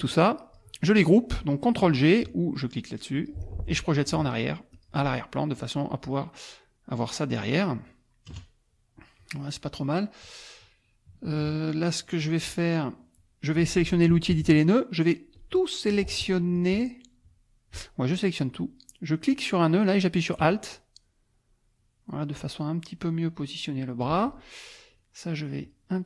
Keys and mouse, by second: 3.1 click, 4.7 click, 5.6-7.2 drag, 7.3 click, 8.3 KP_Add, 8.9 click, 9.9 click, 11.3 KP_Subtract, 11.9 click, 12.7 click, 14.3 n, 15.3-16.5 drag, 16.5-18.3 drag, 19.3-24.5 drag, 24.9 click, 25.6 click.